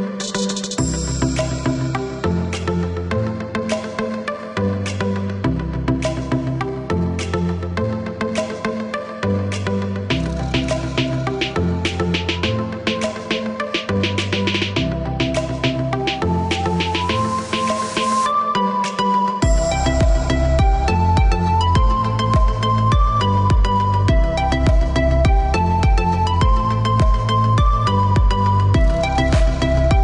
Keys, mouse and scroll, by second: 0.7 click, 1.3 click, 2.1 KP_7, 2.4 KP_0, 2.6 KP_Enter, 3.1 Return, 4.9 click, 5.8 click, 6.5 click, 7.2 KP_1, 7.6 KP_0, 7.9 KP_5, 8.2 KP_Enter, 10.1 click, 11.4 click, 12.5 KP_1, 12.7 KP_2, 12.9 KP_0, 13.1 KP_Enter, 14.4 Escape, 15.8 click, 17.2 click, 23.2 click, 26.6 click, 27.5 click, 29.4 Escape.